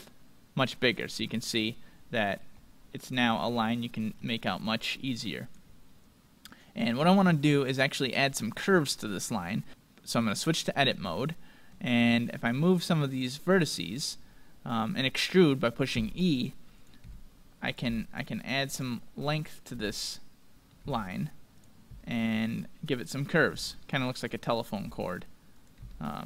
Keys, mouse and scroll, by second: 0.0-1.5 drag, 1.5-5.4 middle drag, 4.6-6.4 drag, 7.4-9.7 middle drag, 10.0-12.4 drag, 11.2-13.1 middle drag, 12.4 right click, 14.2 click, 14.2 middle click, 15.0-17.1 middle drag, 15.9 e, 17.1 e, 17.9 e, 19.1-22.1 middle drag, 19.8 e, 20.9 e, 21.9 e, 22.9-24.7 middle drag, 23.5 e, 24.9 e, 25.8 e.